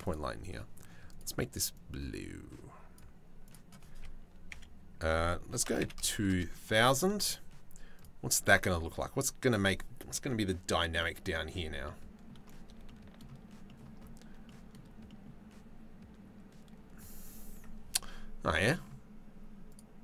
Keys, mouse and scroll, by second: 5.7 KP_0, 5.9 KP_0, 11.5 click, 12.5 shift+middle click, 13.3 middle click, 14.2 shift+middle click, 14.3 click, 14.7 click, 19.3 click.